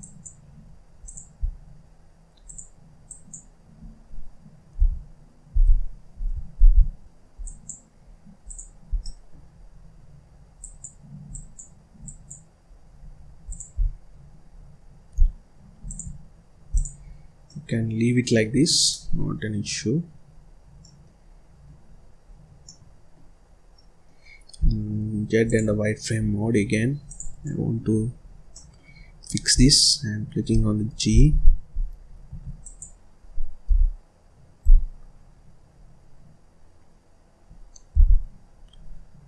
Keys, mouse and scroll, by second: 0.5-1.0 scroll up 2, 1.0 click, 1.4-1.8 scroll down 2, 1.8-2.4 scroll up 1, 2.4 click, 3.0 click, 3.8-4.2 scroll down 1, 4.2-4.7 scroll up 1, 4.7 h, 6.5 ctrl+z, 7.4 click, 8.0-8.4 scroll up 1, 8.4 click, 8.9 scroll down 1, 9.0 middle click, 9.5 scroll down 1, 9.8-10.5 scroll up 1, 10.5 click, 11.2 click, 11.9 click, 12.6-12.9 scroll up 1, 12.9 scroll down 1, 13.2 scroll up 1, 13.4 click, 13.7-14.5 scroll down 5, 14.5-15.1 scroll up 2, 15.1 z, 16.6 click, 17.0 scroll up 3, 17.2 scroll down 1, 17.4-18.4 middle drag, 18.4-18.8 scroll down 1, 18.8-20.3 middle drag, 20.3-20.6 scroll up 1, 20.6 scroll down 1, 20.7 middle click, 21.2-21.6 scroll up 1, 21.7-22.2 scroll up 1, 22.2-22.6 scroll down 3, 22.6 middle click, 23.3 scroll up 1, 23.6 scroll down 1, 23.7 middle click, 24.5 z, 26.1-26.5 scroll down 1, 26.5-26.9 scroll up 1, 27.0 click, 27.4 middle click, 27.8-28.1 scroll down 1, 28.1-28.4 scroll up 1, 28.4 middle click, 28.9-29.4 scroll up 1, 29.4 click, 31.0 g, 32.2 Escape, 32.5 click, 33.6 g.